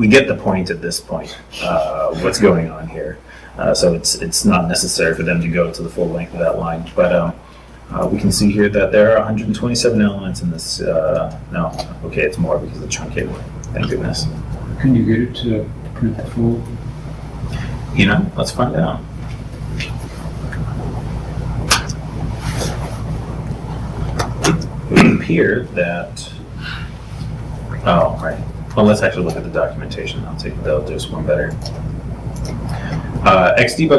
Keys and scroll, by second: 12.5 super+Tab, 26.2 super+Tab, 28.0 super+t, 29.8 super+t.